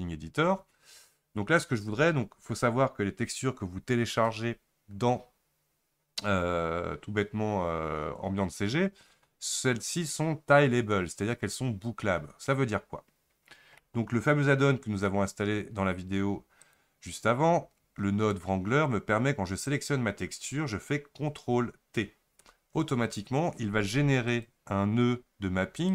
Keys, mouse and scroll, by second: 0.8-1.2 scroll down 2, 1.2-1.8 scroll up 1, 16.7 click, 22.5 ctrl+t, 24.4 click.